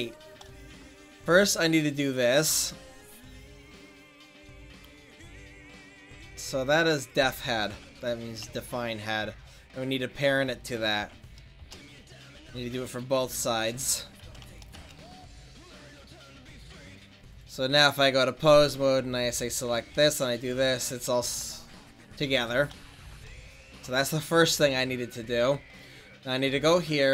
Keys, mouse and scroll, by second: 0.1-1.8 middle drag, 1.8-15.0 right drag, 16.2-17.3 middle drag, 17.3 click, 17.9-19.8 drag, 18.9 right click, 19.8 r, 20.4-21.4 middle drag, 23.0 ctrl+s, 26.6 click.